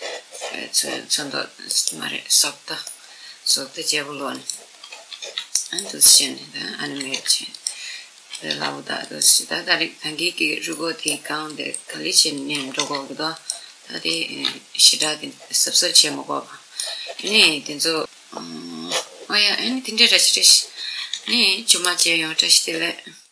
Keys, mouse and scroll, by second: 1.5 right click, 2.5-4.1 middle drag, 4.0-10.7 drag, 4.5 middle click, 4.9 r, 6.8 r, 8.2 r, 9.8 middle click, 9.8 scroll up 1, 10.4-12.3 middle drag, 11.2-15.4 drag, 12.5 r, 14.0 r, 14.9 middle click, 15.3-17.2 middle drag, 17.0 r, 17.8 click, 19.1-21.2 middle drag, 20.8 g, 21.2-21.6 scroll up 1, 21.6 middle click, 21.6 right click, 22.9 click.